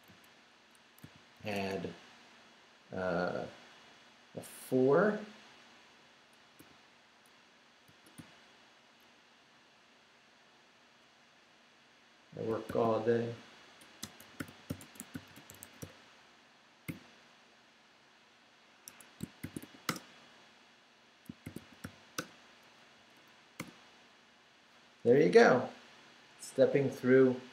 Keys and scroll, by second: 1.0 i, 1.5 space, 6.4-9.1 typing, 12.7-16.9 typing, 18.9 Escape, 19.2-20.1 typing, 21.2-22.3 typing, 23.0 Up, 23.6 Return.